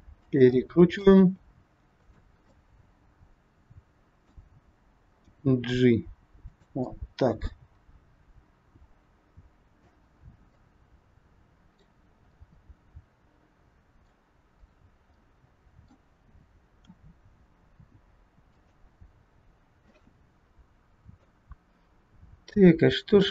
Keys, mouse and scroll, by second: 0.5 middle click, 1.2 r, 2.4 middle click, 5.3 g, 6.9 middle click, 10.3 scroll down 3, 10.6 middle click, 14.6 click, 15.0 middle click, 16.8 r, 19.9 scroll up 1, 20.0 middle click, 23.2 click.